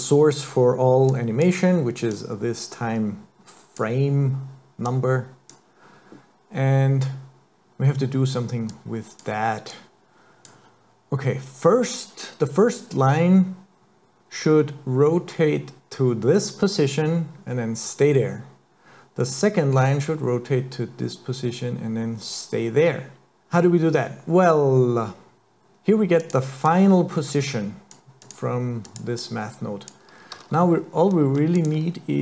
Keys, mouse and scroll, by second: 1.1 click, 2.2 click, 4.9 click, 8.8 click, 9.7 click, 26.2 click, 26.7 click, 28.2 click, 28.9 click, 29.2 click, 30.4 shift+a.